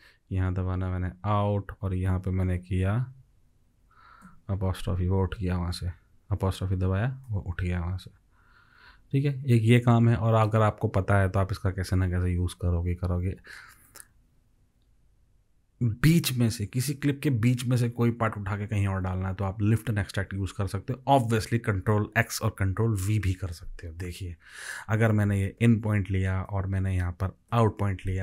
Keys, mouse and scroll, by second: 1.0 o, 4.3-6.9 drag, 25.6 i, 27.5 o.